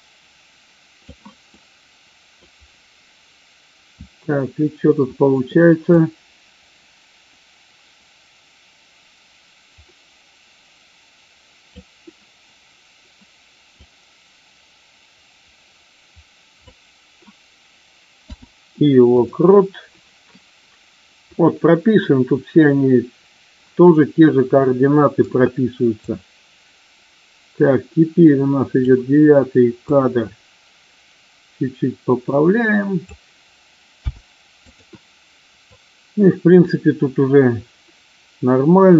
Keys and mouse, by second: 1.4 middle click, 5.9-11.8 drag, 13.7-16.7 drag, 26.0-28.8 drag, 29.9-33.0 drag, 35.7-38.9 drag.